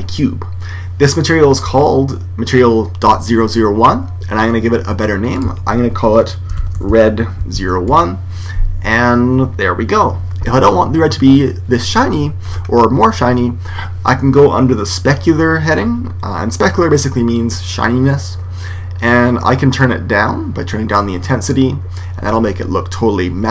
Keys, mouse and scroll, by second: 5.3 click, 12.4-16.5 middle drag, 19.7 click.